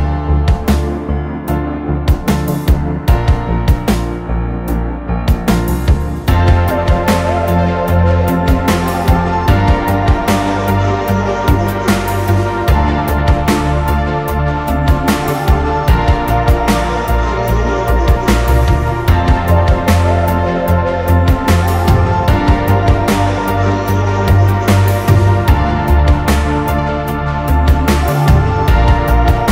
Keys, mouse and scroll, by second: 0.8 scroll down 1, 1.1 double click, 1.2 right click, 2.0 double click, 2.8 scroll down 1, 3.1 middle click, 4.6 middle click, 7.1 scroll up 1, 7.5-7.9 scroll down 1, 7.9 scroll up 1, 8.3 double click, 9.5 f, 10.4 double click, 12.1 Return, 13.1 typing, 15.0 Return, 15.2 space, 15.7 space, 16.2 scroll down 1, 16.4 middle click, 16.8 scroll up 1, 17.0 middle click, 19.7 Delete, 22.5-23.0 scroll down 1, 23.0 scroll up 1, 23.2 middle click, 25.2 m, 27.4 middle click, 27.9 scroll down 1, 28.1 middle click, 28.9 Delete.